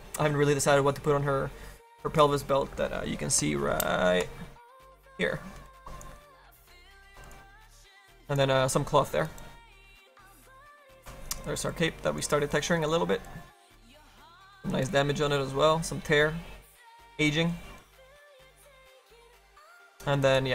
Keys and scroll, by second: 7.0 F3, 9.3 space, 11.2 space.